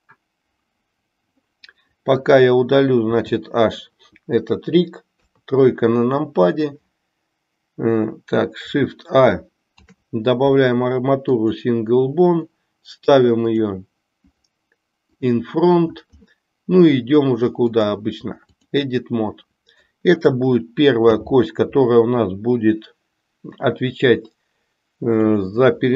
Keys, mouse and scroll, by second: 3.0 h, 9.6 shift+a, 17.6-18.7 drag, 21.0 g.